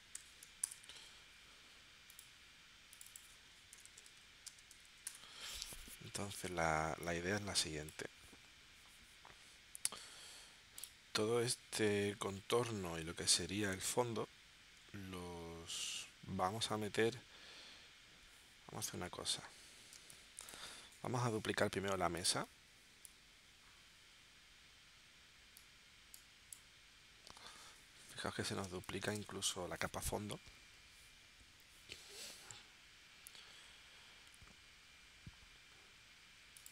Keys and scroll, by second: 0.0-0.7 typing, 3.5-4.7 typing, 5.0 Return, 10.8 v, 20.0 space, 21.1 v, 28.1 v, 28.8 space.